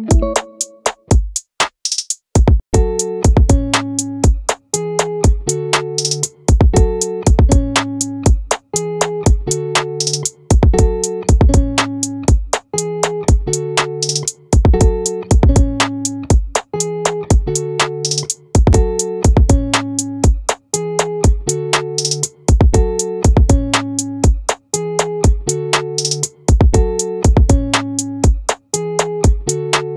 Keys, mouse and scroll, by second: 2.5-4.1 drag, 7.4 click, 7.6-8.9 right drag, 8.9-10.7 middle drag, 16.1-18.3 drag, 18.7 ctrl+z, 19.7 right click, 21.4-22.7 middle drag, 23.9-27.5 middle drag.